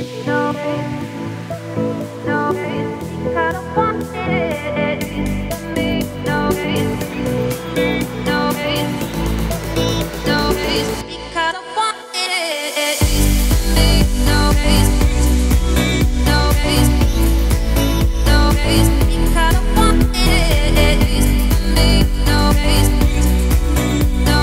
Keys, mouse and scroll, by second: 0.5 ctrl+s, 0.7-1.5 middle drag, 1.5 click, 1.9 middle drag, 2.1-2.6 scroll up 1, 2.6 click, 3.0-3.9 scroll up 3, 3.3 shift+middle drag, 3.9-4.6 scroll down 4, 5.0-6.6 scroll down 3, 6.6 z, 6.9-7.9 middle drag, 7.9-8.5 scroll up 2, 8.5 g, 13.5 z, 13.8-14.3 middle drag, 14.3-14.7 scroll up 5, 14.7-16.1 middle drag, 16.1-16.7 scroll down 4, 16.7 click, 17.0-17.6 middle drag, 17.6-18.0 scroll down 1, 18.0 ctrl+s, 18.2 scroll up 2, 18.4 scroll down 1, 18.5-19.2 middle drag, 19.2 scroll down 1, 19.4-20.0 middle drag, 20.0-20.6 scroll up 7, 20.6-21.0 scroll down 3, 21.0-21.4 middle drag, 21.4 scroll up 1, 21.7-22.6 scroll down 2, 22.6-24.4 middle drag.